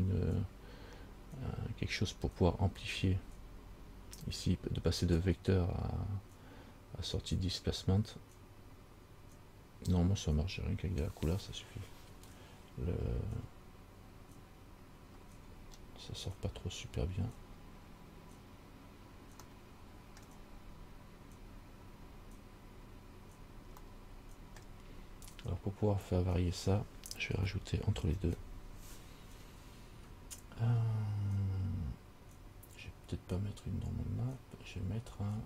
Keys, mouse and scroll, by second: 15.7 scroll down 2, 19.7 middle click, 24.3 middle click, 28.3 shift+a.